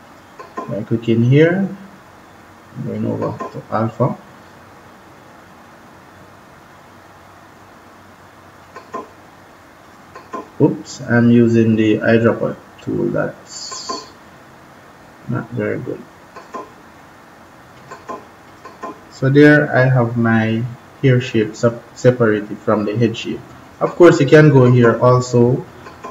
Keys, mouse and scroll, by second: 2.9 click, 8.5 click, 13.4 click, 16.1 click, 23.6 click.